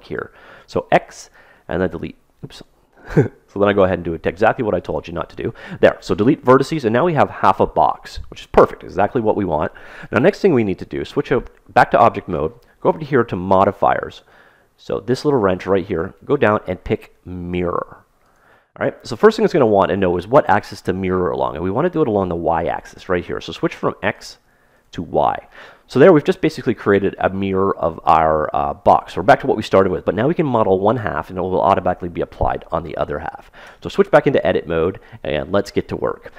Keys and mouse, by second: 0.3 x, 2.8 ctrl+z, 3.5 x, 6.2-8.2 middle drag, 11.1 Tab, 14.7-17.7 drag, 24.1-26.6 drag, 26.7-28.6 middle drag, 33.7 Tab, 34.6 middle click, 36.2-36.3 middle drag.